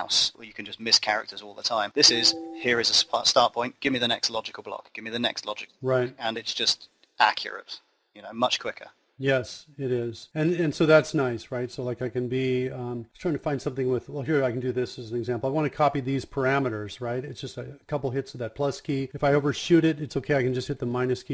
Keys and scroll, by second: 15.3 KP_Add, 20.3 KP_Subtract.